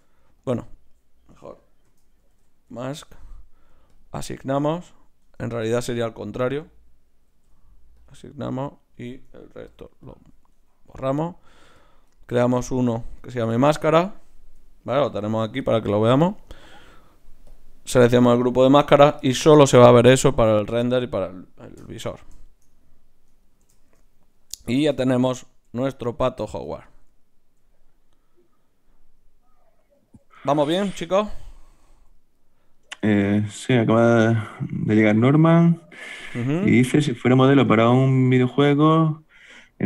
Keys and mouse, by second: 0.4-5.8 drag, 4.5 Tab, 5.2 Tab, 7.3 ctrl+i, 8.0-13.7 drag, 9.5 ctrl+i, 10.5 Tab, 15.1 KP_Divide, 16.5 middle click, 17.5-19.2 drag, 17.5 right click, 21.8 KP_Divide, 32.7-34.4 right drag, 34.4-39.8 middle drag.